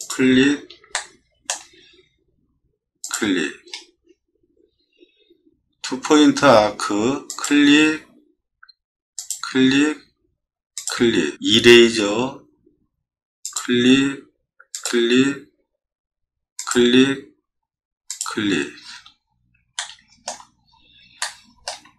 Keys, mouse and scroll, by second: 0.0 click, 0.9 shift+middle click, 3.0 click, 3.6-4.2 scroll up 6, 7.3 click, 9.2 click, 12.1 e, 13.4 click, 14.7 click, 16.6 click, 18.1 click, 18.8 click, 19.7 shift+middle click, 20.6 middle click, 21.2 shift+middle click.